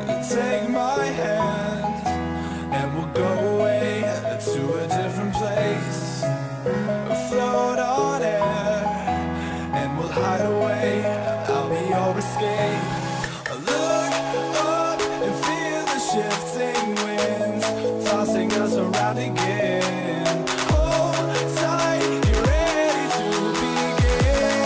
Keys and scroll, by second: 4.5-6.6 typing, 7.8 ctrl+d.